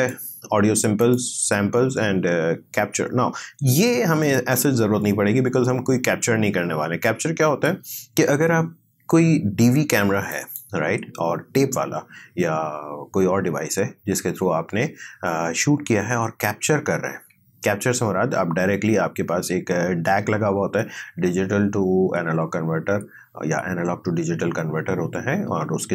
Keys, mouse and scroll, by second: 4.3 click, 10.3 click.